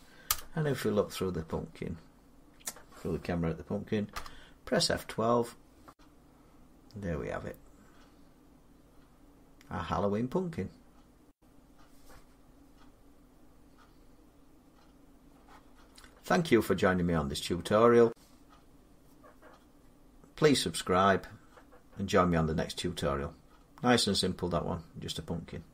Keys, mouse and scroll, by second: 0.1 0, 1.5 middle click, 1.6 middle click, 3.9 F12, 4.5-5.7 scroll up 2, 5.7 scroll down 3, 6.4-7.1 scroll up 1, 7.1-8.7 scroll up 1, 8.7 scroll up 1, 11.1 Tab, 11.1-11.7 scroll down 2, 12.9 middle click.